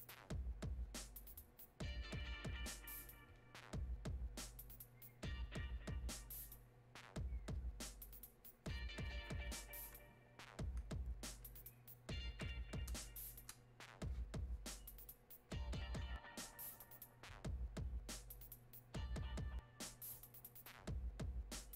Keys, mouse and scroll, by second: 11.4-15.9 alt+drag.